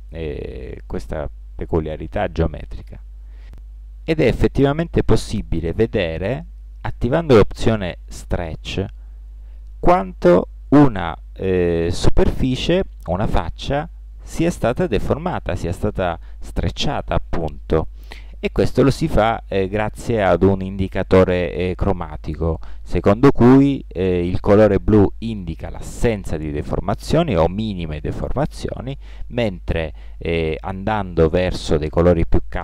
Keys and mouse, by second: 3.4-8.7 drag, 9.4-11.2 drag.